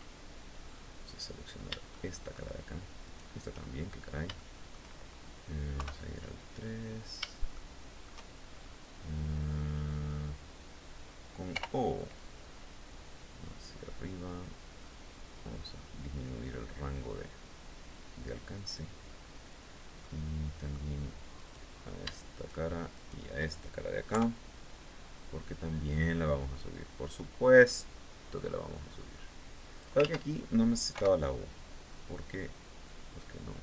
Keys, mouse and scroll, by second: 0.6 right click, 1.4 shift+middle click, 2.6 shift+right click, 3.2-3.6 shift+scroll down 1, 3.9 shift+middle click, 5.3 KP_3, 7.1 shift+middle click, 7.8-8.4 shift+scroll down 3, 11.0 o, 11.7-14.4 drag, 14.4 scroll up 1, 14.9-15.2 scroll up 1, 16.6-16.9 scroll down 1, 19.6 middle click, 20.9 right click, 21.9 shift+right click, 22.5 shift+right click, 23.6 KP_3, 25.0-27.4 drag, 27.4-27.8 scroll down 2, 28.0-28.3 scroll up 2, 28.6-29.0 scroll up 2, 29.6 ctrl+z, 30.5 o, 31.4-33.6 drag.